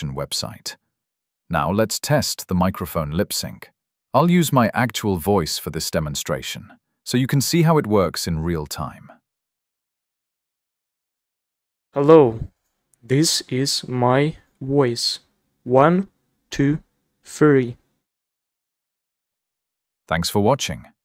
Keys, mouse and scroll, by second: 0.5 click, 8.8 click, 10.1 w, 11.1 a, 19.0 Escape.